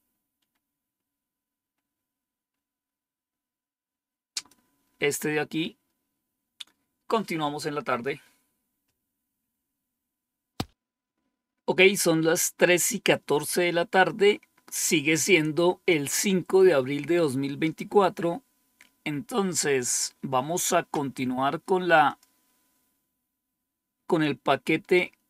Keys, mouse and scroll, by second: 0.0-0.5 scroll down 2, 1.6 scroll down 3, 2.4 scroll down 2, 4.2 click, 21.9 click.